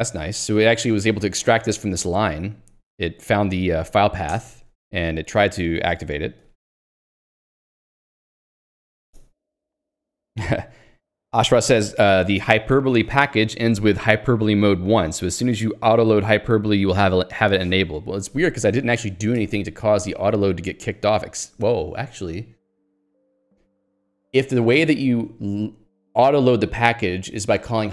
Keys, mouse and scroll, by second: 6.5 Escape, 20.1 j.